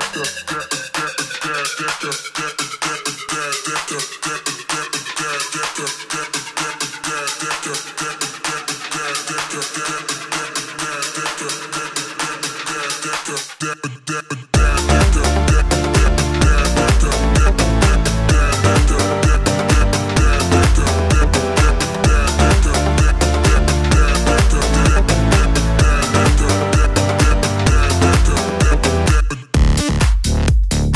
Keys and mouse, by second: 0.1 KP_1, 0.2 KP_3, 0.9 g, 2.8-5.1 middle drag, 5.1-6.5 drag, 5.8 shift+d, 6.5 middle click, 6.8-11.3 drag, 11.3-18.4 middle drag, 11.7-14.0 typing, 16.0 s, 17.2 s, 18.4-23.7 shift+drag, 23.3 s, 23.7-26.0 middle drag, 23.8 s, 25.2 s, 26.0-30.7 drag, 27.0 KP_1, 27.1 KP_3, 30.2 r, 30.7 middle click.